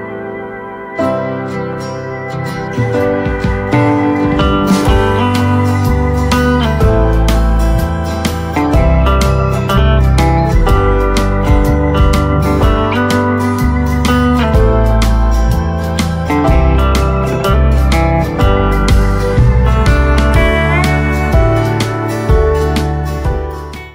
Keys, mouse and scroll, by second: 1.8-2.4 typing, 2.4 click, 3.3 right click, 6.6 click, 7.1 scroll down 1, 7.6-9.9 right drag, 9.9 scroll down 1, 10.2 shift+right click, 11.9 click, 17.0-23.9 right drag, 22.6 typing.